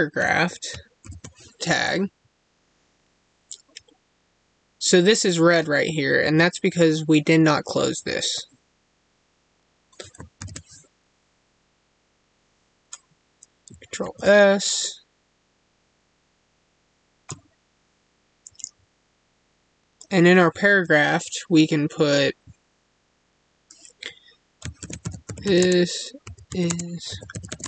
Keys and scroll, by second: 14.0 ctrl+s, 25.5 space, 26.6 space, 27.5 space.